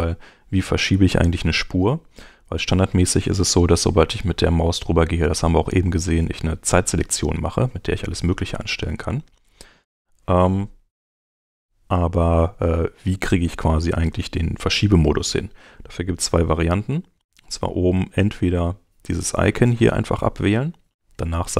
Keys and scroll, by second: 10.8 Home.